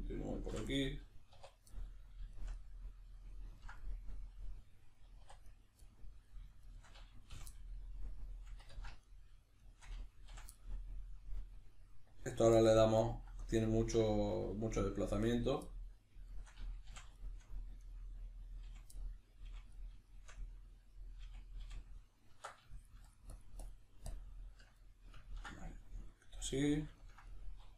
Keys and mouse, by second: 0.5 f, 0.7-5.5 middle drag, 1.3 1, 5.2 2, 5.5 right click, 5.9 middle click, 6.6 shift+right click, 7.3 f, 7.5-9.0 middle drag, 8.7 ctrl+z, 9.0 right click, 9.6 shift+right click, 10.3 f, 10.5-15.3 middle drag, 15.3 right click, 15.7 middle click, 16.3 shift+right click, 16.9 f, 17.1 shift+middle click, 17.8 right click, 18.7 f, 19.0-21.1 middle drag, 19.5 f, 21.3 f, 22.3 Tab, 22.8 shift+click, 24.8 middle click.